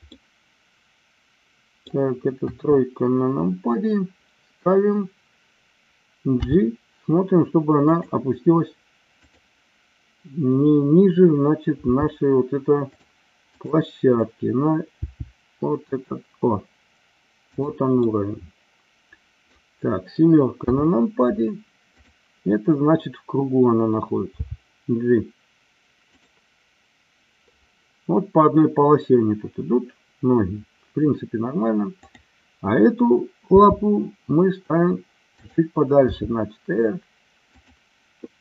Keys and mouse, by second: 0.1-1.8 middle drag, 2.5 KP_3, 6.3 g, 7.8 click, 9.2 click, 11.9 g, 15.0 g, 17.5 click, 18.1-19.6 middle drag, 20.6 KP_7, 24.2 g, 32.0-33.0 drag, 33.5 g, 35.4 click, 36.1 r, 37.5 click.